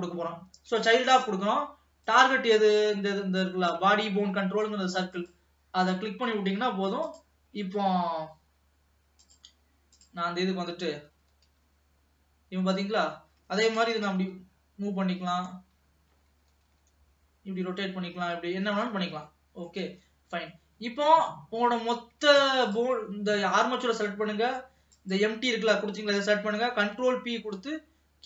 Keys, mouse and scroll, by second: 2.1 click, 7.2-10.2 drag, 10.8 middle click, 11.3 r, 13.9 g, 16.5 r, 19.1 scroll down 2, 19.4 middle click, 20.1 ctrl+s, 20.6-21.9 middle drag, 21.9-22.5 scroll up 1, 22.5 ctrl+s, 22.8 click, 25.0 shift+click, 26.7 ctrl+p.